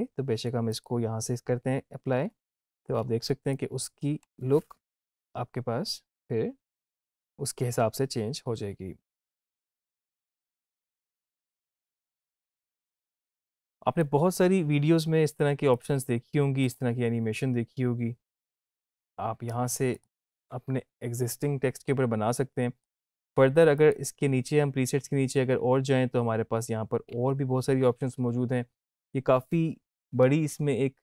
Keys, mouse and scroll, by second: 0.7 click, 4.7 space, 12.3 space, 13.4-14.0 drag, 19.9 click, 22.3-22.9 drag.